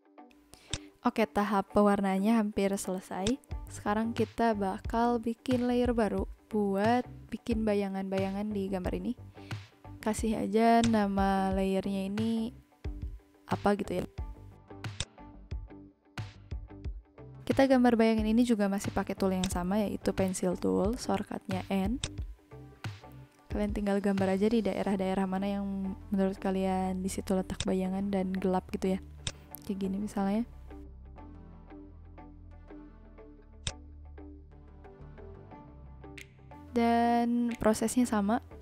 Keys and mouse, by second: 0.6 click, 2.3 v, 3.1 click, 14.9 click, 15.3 n, 17.3 n, 19.3 click, 21.9 click, 27.5 click, 29.1 click, 30.6 ctrl+z, 31.4 v, 32.6 n, 33.5 click.